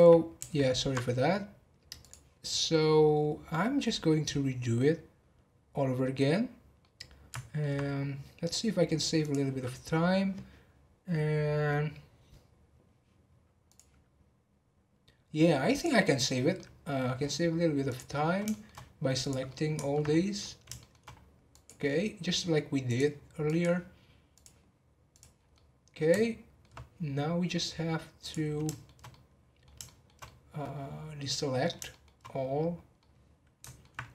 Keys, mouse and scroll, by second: 1.9 click, 2.4 scroll down 1, 2.9 scroll up 1, 5.2 scroll down 1, 6.5 scroll down 3, 6.7-7.9 middle drag, 7.9 scroll up 2, 9.2 click, 9.7-11.9 scroll down 1, 13.6-16.3 drag, 16.3 scroll down 2, 16.5 middle click, 17.2-17.8 scroll down 3, 17.8 click, 18.1-18.5 scroll down 4, 18.5 shift+middle click, 19.2 click, 19.5 middle click, 20.1-20.4 scroll up 3, 20.8 shift+middle click, 21.5 click, 22.8 click, 24.3-25.3 drag, 25.3 scroll down 4, 25.5-27.2 middle drag, 27.2 scroll down 2, 27.5 middle click, 28.2 click, 28.6-32.2 shift+middle drag, 32.2-32.6 scroll down 5, 32.9-33.9 middle drag, 33.9-34.1 scroll up 2.